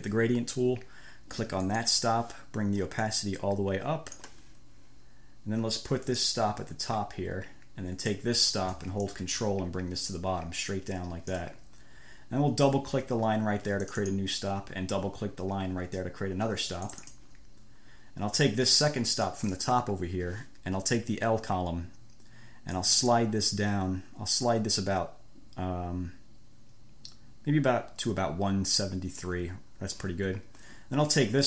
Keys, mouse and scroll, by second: 2.0 click, 3.3-4.7 drag, 6.5 click, 7.2-8.4 scroll up 2, 8.4 scroll up 1, 9.4-11.8 ctrl+drag, 14.1 click, 17.1 click, 19.5 click, 23.0-29.7 drag.